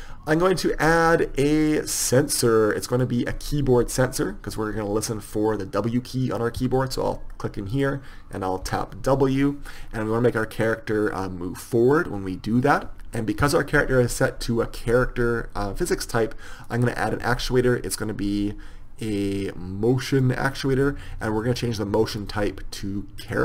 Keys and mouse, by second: 3.2 click.